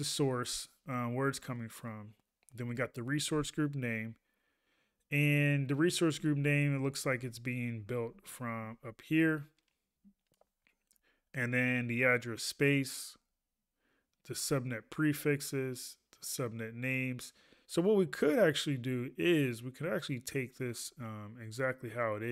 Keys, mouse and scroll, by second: 3.3 ctrl+a, 8.8 ctrl+a.